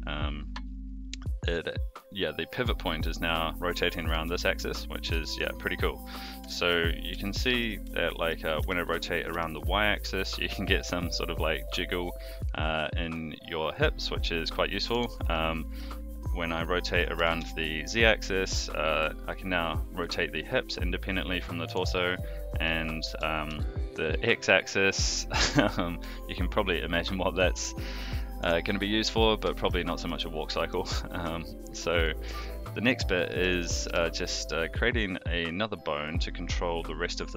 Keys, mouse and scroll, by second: 4.2 alt+r, 5.2 shift+middle drag, 5.6-6.0 middle drag, 6.5 shift+middle drag, 7.2-7.6 shift+middle drag, 7.8-8.3 middle drag, 8.6 r, 15.3-15.8 middle drag, 16.6-17.0 middle drag, 17.1 r, 22.1-22.6 middle drag, 23.1 r, 28.7-29.2 middle drag, 29.5 shift+middle click, 29.9 middle drag, 30.5 shift+middle drag, 30.9-31.2 middle drag, 32.1-32.4 middle drag, 33.2 middle click, 33.8 KP_3.